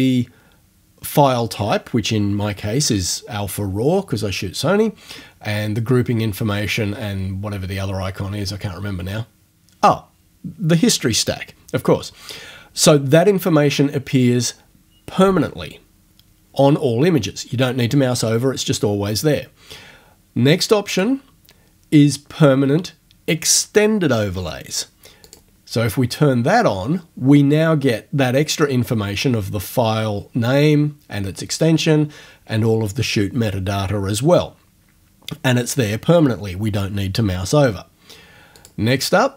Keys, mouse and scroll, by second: 21.0 click, 25.3 click, 38.6 click.